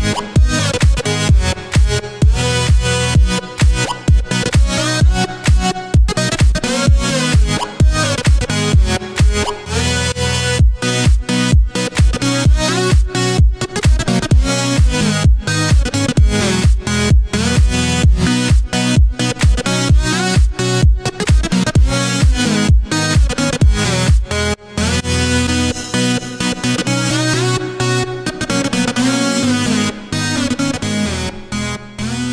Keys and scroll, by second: 2.4 w, 3.0 a, 3.7 e, 4.0 w, 5.4 q, 6.3 Escape, 8.8 F12, 17.8-19.8 typing, 24.5-27.7 typing.